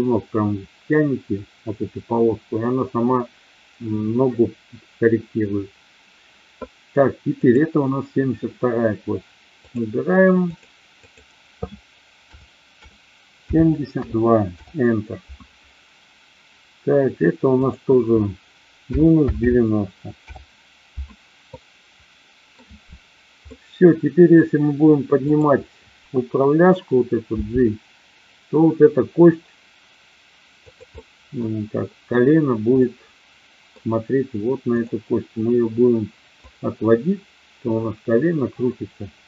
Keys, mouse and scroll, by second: 7.4-9.8 drag, 10.5-15.3 drag, 17.5-21.0 drag, 21.4-22.4 middle drag, 23.4-24.3 middle drag, 25.2 click, 27.3 g, 30.5 click, 30.8-31.4 middle drag, 32.8-33.7 middle drag, 34.7-35.7 drag, 36.4-39.2 drag.